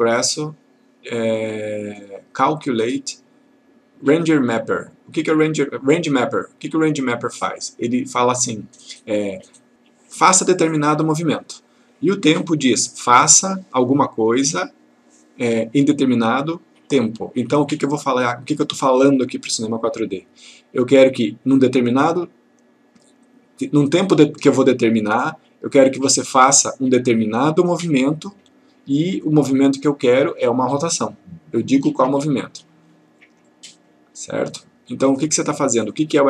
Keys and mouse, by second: 5.6-6.6 click, 25.2-26.7 click, 33.5-35.0 click.